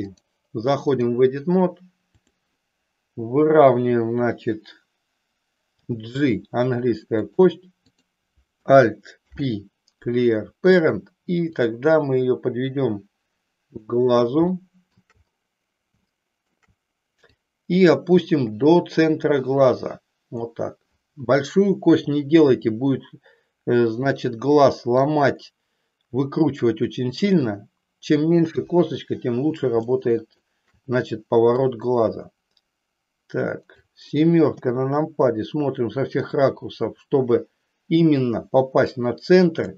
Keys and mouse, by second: 0.0-1.1 drag, 2.1 click, 5.8 g, 7.2 click, 7.9 click, 9.1 alt+p, 11.5-13.9 drag, 14.6 shift+middle click, 16.1 shift+middle click, 17.2-20.5 drag, 22.5 s, 24.9-27.4 drag, 28.5 KP_1, 29.9 shift+middle click, 31.5-33.9 drag, 34.5 KP_7, 36.2-39.6 drag.